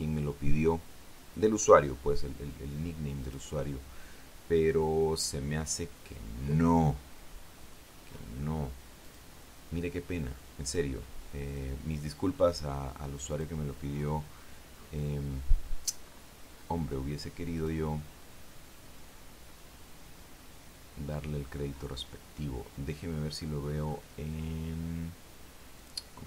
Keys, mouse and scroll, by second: 0.5-1.0 scroll down 1, 2.3-2.9 scroll up 2, 4.1 click, 6.4 click, 7.2-8.0 scroll down 3, 8.9-9.2 scroll up 1, 9.8 click, 12.3 click, 14.1 click, 14.7-15.9 scroll down 5, 16.8-17.5 scroll up 4, 18.4 click, 19.8-20.2 scroll down 2, 21.3-21.9 scroll down 4, 22.6 scroll up 2, 24.7-25.1 scroll up 2.